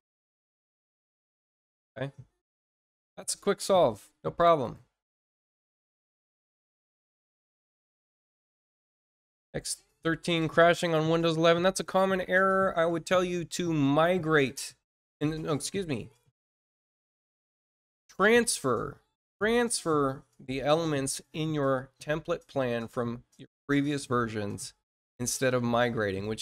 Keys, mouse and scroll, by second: 2.6 scroll down 1, 6.2 click, 7.9 scroll down 1, 10.2-10.6 scroll down 1.